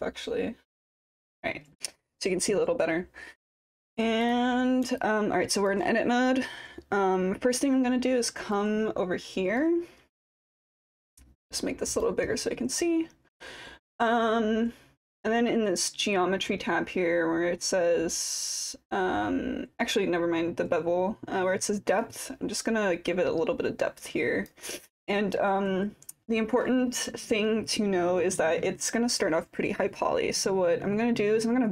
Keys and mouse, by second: 5.0-5.7 alt+drag, 8.5-9.7 drag, 11.4 click, 22.1-24.7 drag.